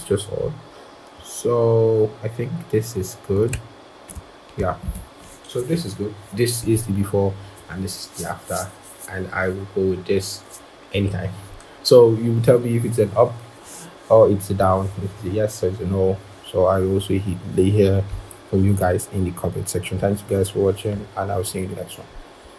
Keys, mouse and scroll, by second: 0.2 shift+click, 1.1 scroll.